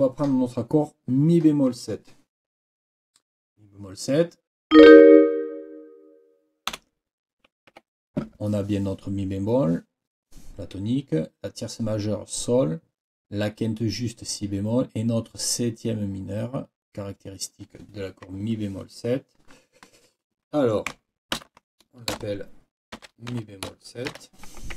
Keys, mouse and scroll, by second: 6.7 Delete, 7.7 Escape, 21.3 ctrl+k, 23.0 shift+e, 23.3 shift+b.